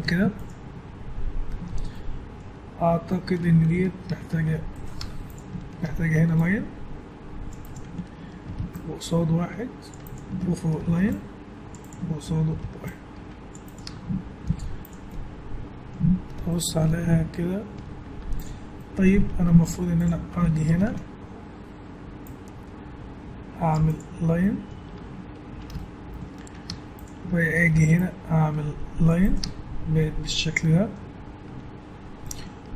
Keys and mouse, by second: 1.2 middle click, 4.1 ctrl+r, 4.7 click, 5.0 Tab, 5.8 ctrl+r, 8.5 ctrl+r, 10.8 ctrl+r, 12.5 ctrl+r, 13.8 Tab, 14.3 middle click, 14.4 z, 15.1 middle click, 15.6 middle click, 18.1 Tab, 19.6 ctrl+Tab, 20.6 ctrl+r, 24.2 middle click, 24.8 Tab, 26.7 Tab, 27.6 ctrl+r, 29.4 Tab.